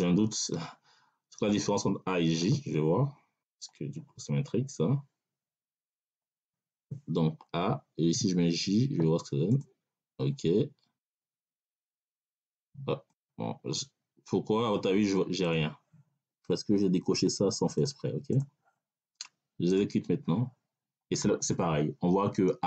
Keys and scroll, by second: 7.4 BackSpace, 8.0 j.